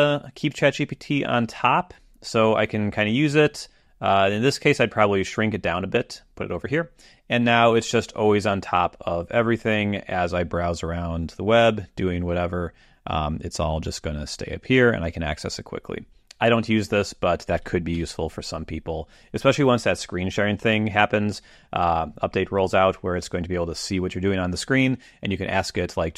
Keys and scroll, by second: 17.9 super+,.